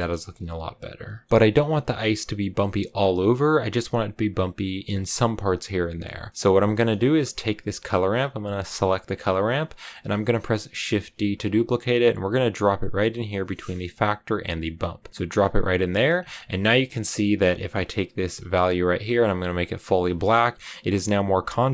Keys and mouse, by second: 1.0 middle click, 8.6 click, 10.8 shift+d, 14.6 click, 15.1 click, 15.7 middle click.